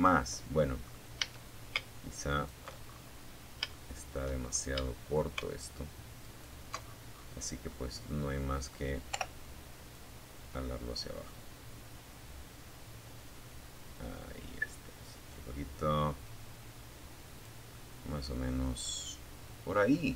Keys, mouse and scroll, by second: 0.5 alt+shift+right click, 1.0-1.7 alt+shift+scroll up 3, 1.9 shift+middle click, 2.6-3.0 shift+scroll up 2, 3.0 shift+middle click, 4.4 alt+shift+middle click, 4.5 alt+shift+right click, 5.0-5.9 scroll down 4, 5.9-7.0 middle drag, 7.3 o, 8.1 click, 8.7-9.0 scroll up 1, 9.6-10.2 scroll up 1, 11.1 scroll down 1, 13.0 scroll down 1, 16.0 click, 16.6 scroll down 1, 17.0-19.5 drag, 19.5 Tab, 19.8-20.1 drag.